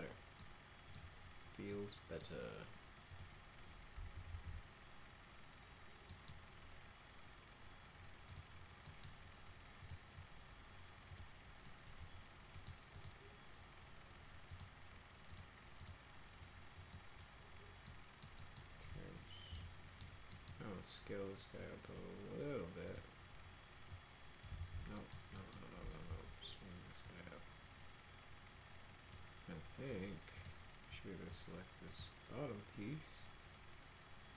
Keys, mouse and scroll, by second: 0.4 middle click, 1.7 middle click, 3.1 click, 4.3 alt+x, 6.1 middle click, 8.3 click, 8.8 middle click, 9.8 click, 11.1 click, 11.6 middle click, 12.5 click, 12.9 click, 14.5 click, 15.3 click, 15.8 click, 16.9 middle click, 17.8 middle click, 18.3 middle click, 19.5 r, 19.5 middle click, 20.3 middle click, 21.5 click, 22.9 click, 23.2-23.9 scroll up 2, 23.9 click, 24.5 ctrl+z, 25.0 middle click, 25.3 middle click, 26.0 w, 27.0-29.1 drag, 30.3 click, 30.9 click, 31.9 click.